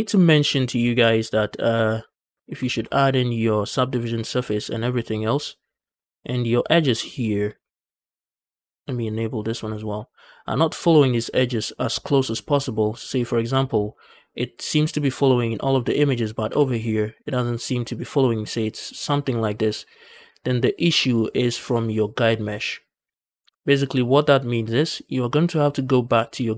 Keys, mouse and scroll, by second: 0.1 scroll down 2, 0.5 shift+middle click, 0.8 z, 1.1-1.7 scroll up 1, 1.7 scroll down 1, 2.0 shift+middle click, 2.1 scroll up 1, 2.3 Tab, 2.3 scroll down 2, 2.5 shift+middle click, 6.8 click, 7.3 scroll down 1, 7.5 shift+middle click, 7.9-9.1 scroll down 1, 9.1 click, 9.6 shift+middle click, 13.0 click, 13.4-16.1 scroll up 2, 16.3 g, 17.7 click, 20.0 ctrl+z, 23.3 Tab, 24.7 click, 25.4 click.